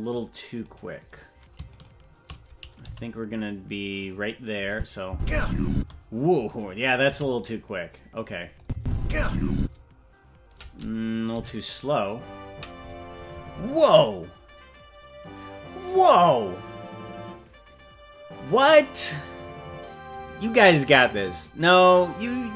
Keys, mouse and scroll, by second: 0.7-1.7 right drag, 1.7-2.8 shift+right drag, 2.8 g, 4.7 click, 5.0 space, 5.7 space, 6.5 right click, 7.0 g, 8.6 click, 8.7 space, 9.6 space, 11.3 g.